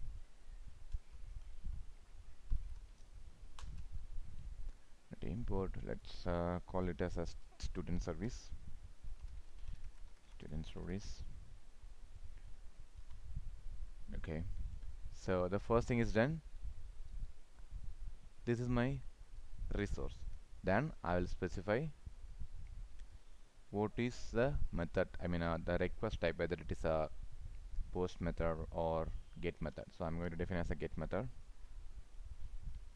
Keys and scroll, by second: 3.6 ctrl+shift+o, 13.1 ctrl+s.